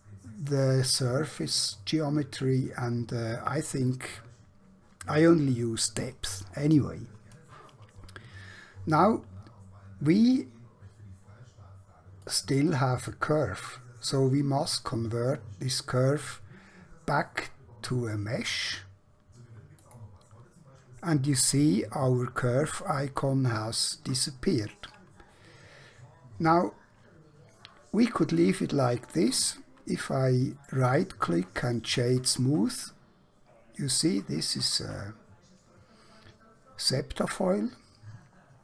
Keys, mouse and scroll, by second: 1.5 middle click, 12.2 click, 19.7 click, 24.2 middle click, 30.6 right click, 31.6 click, 32.8 middle click.